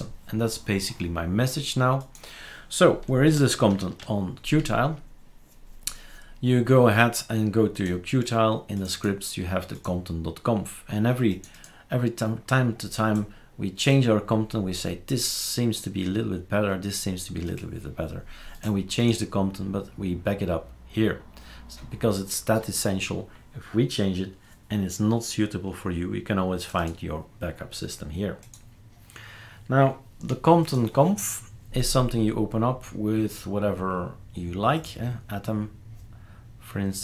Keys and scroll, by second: 3.7 shift+super+Return.